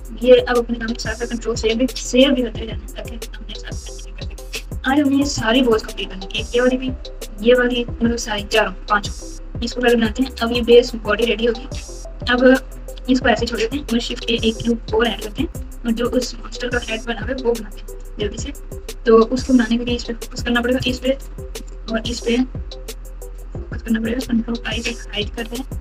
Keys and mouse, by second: 1.0 ctrl+s, 6.4 click, 11.7 Tab, 12.1 Tab, 12.4 Tab, 12.9 Tab, 14.0 shift+a, 17.2 s, 21.6 shift+click, 22.8 KP_Divide, 23.2 KP_Divide, 24.5 ctrl+i, 25.3 h.